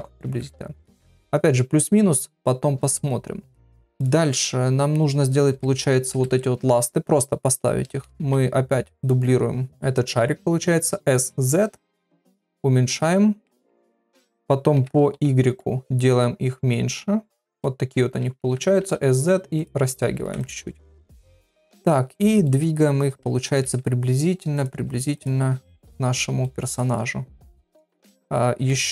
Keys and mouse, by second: 0.2 ctrl+a, 3.9 click, 6.1 KP_7, 8.2 shift+d, 9.7 shift+middle click, 9.7 KP_1, 10.9 s, 12.3 s, 13.5 KP_3, 14.2 shift+middle click, 17.6 middle click, 18.4 s, 20.2 ctrl+a, 21.1 KP_3, 21.7 g, 22.4 shift+middle click, 23.1 g, 23.6 r, 24.7 g, 25.6 KP_7, 26.4 shift+middle click, 26.9 g, 28.2 s.